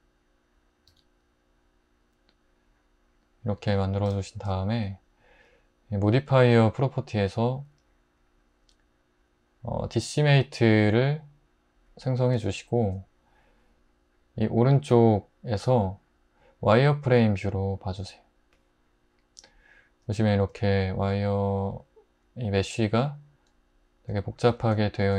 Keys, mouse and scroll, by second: 0.9 Tab, 3.8 click.